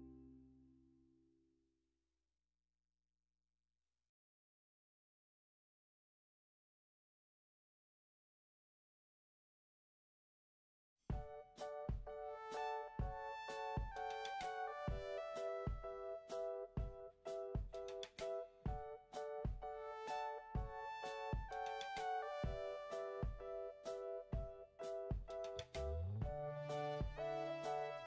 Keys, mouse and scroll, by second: 5.3 Delete, 17.6 5, 17.8 5, 18.0 Return.